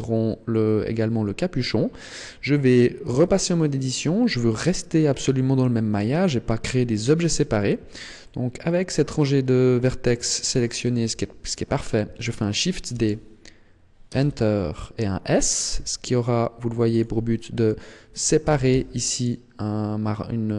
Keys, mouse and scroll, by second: 1.4-2.7 scroll up 1, 3.2 Tab, 8.1 middle click, 11.0 KP_1, 12.8 shift+d, 15.6 s, 16.9 click, 17.2 middle click, 18.4 g.